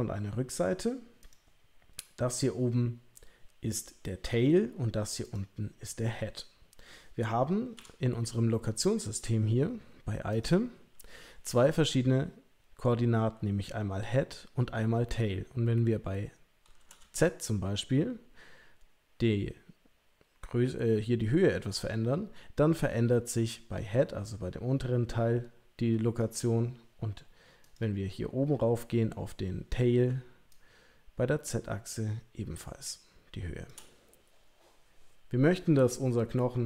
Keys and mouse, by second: 7.8 n, 10.3 click, 17.2-26.4 shift+drag, 27.6 click.